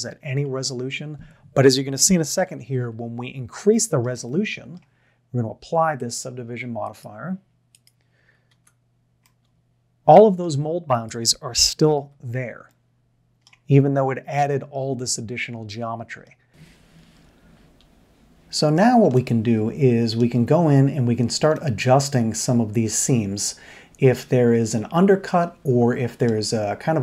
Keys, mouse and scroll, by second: 0.0 l, 0.5-0.9 middle drag, 2.6 Tab, 3.7-4.0 shift+middle drag, 4.2-4.7 middle drag, 6.1-7.0 drag, 8.5 Tab, 9.3-9.6 middle drag, 12.0 l, 13.9 l, 14.5-16.2 middle drag, 16.5-20.2 middle drag, 21.7-23.7 middle drag, 24.4-26.3 middle drag.